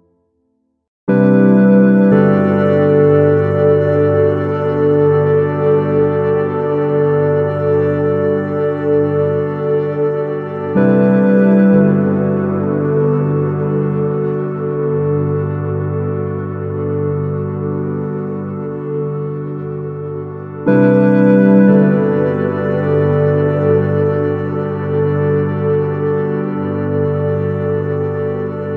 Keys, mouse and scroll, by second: 0.8 shift+z, 5.4-10.8 middle drag, 18.4-20.4 middle drag, 22.2-24.2 middle drag, 24.4 KP_0, 25.8-27.7 middle drag, 28.4-28.7 middle drag.